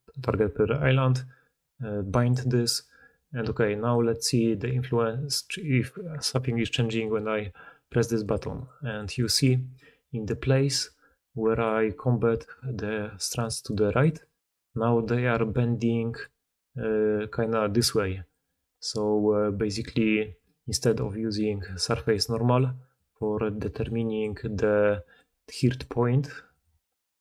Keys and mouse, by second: 2.1-7.1 drag, 3.0 middle click, 3.0 right click, 3.4 g, 4.0 middle click, 4.0 right click, 7.1-8.2 middle drag, 8.2 click, 8.3 middle click, 8.5 click, 8.6 middle click, 8.8 click, 8.9 middle click, 9.0 click, 9.2 middle click, 9.2 click, 9.4 middle click, 9.6 click, 9.7-11.4 middle drag, 11.4 click, 11.6-12.4 middle drag, 12.2-13.6 d, 12.4-16.2 drag, 14.0 d, 14.0-14.8 d, 15.2 d, 16.2-17.3 middle drag, 16.8-18.6 d, 17.3-18.6 drag, 18.6 middle click, 18.6 right click, 19.8 d, 21.2-27.2 typing.